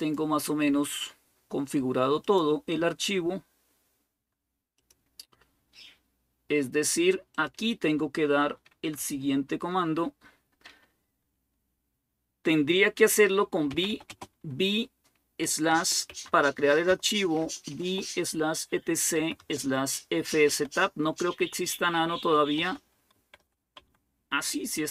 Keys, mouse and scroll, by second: 2.0-5.3 drag, 7.1-13.5 drag, 13.3-14.2 typing, 15.3-17.5 typing, 18.7-23.7 typing.